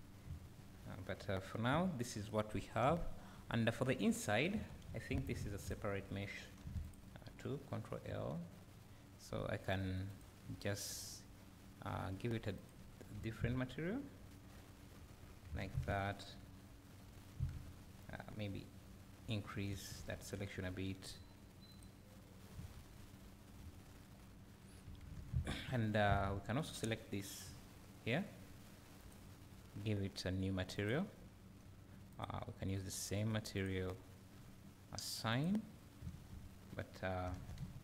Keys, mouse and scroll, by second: 0.0 scroll down 1, 0.3 `, 1.4 scroll up 1, 1.7 `, 4.2 click, 4.5 Tab, 4.9 `, 5.6 2, 5.6 click, 6.7 3, 6.8 click, 10.1 click, 12.7-14.0 drag, 14.0 `, 15.8 `, 17.5 Tab, 20.1 ctrl+KP_Add, 21.8-23.3 drag, 23.3 Tab, 23.6 `, 26.2 Tab, 26.7 click, 27.6 l, 29.1 click, 30.9 drag, 33.8-36.8 drag, 36.8 Tab.